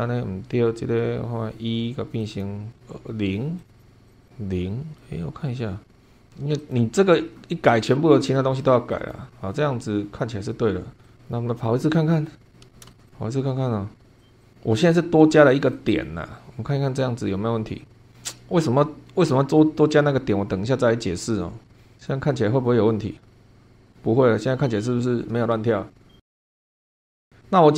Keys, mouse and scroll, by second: 2.2 click, 3.6 click, 4.1 click, 4.2 click, 5.0-6.2 middle drag, 6.6 click, 8.9 click, 11.0 click, 11.2 scroll down 1, 11.6-12.4 middle drag, 12.5 scroll down 1, 12.9 shift+middle click, 13.0 shift+click, 14.2 click, 14.4 click, 15.7 click.